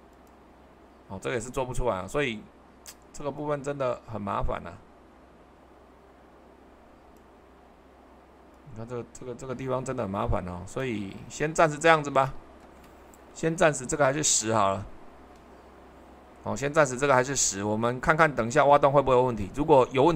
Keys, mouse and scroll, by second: 14.0 typing, 14.6 Return.